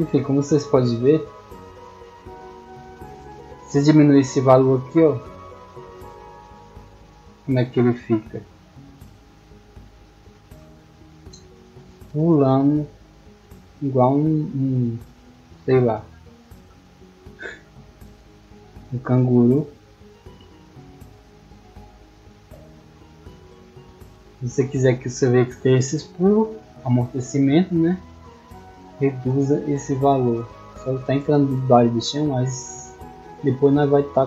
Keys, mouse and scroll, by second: 2.5 click, 8.3 w, 11.1 middle click, 11.1 scroll down 1, 11.5-11.9 shift+middle drag, 13.9-14.6 typing, 18.0 middle click, 18.0 scroll up 1, 18.5-18.9 shift+middle drag, 20.7 right click, 21.5-22.3 drag.